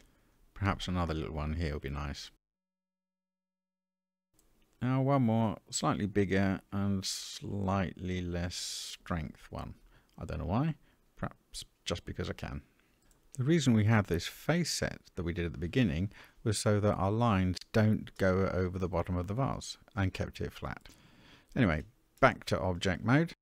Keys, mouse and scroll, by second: 0.4-1.7 ctrl+drag, 2.4-4.0 middle drag, 6.3 f, 8.0-10.0 drag, 10.7 ctrl+click, 12.6-15.6 middle drag, 18.1-19.4 middle drag, 21.2-22.7 drag.